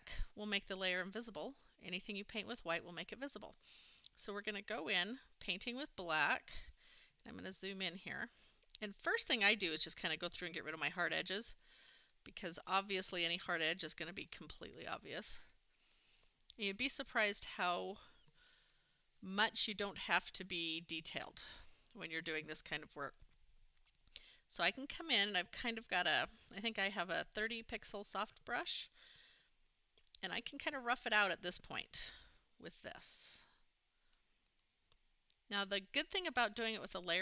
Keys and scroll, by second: 7.0 super+=.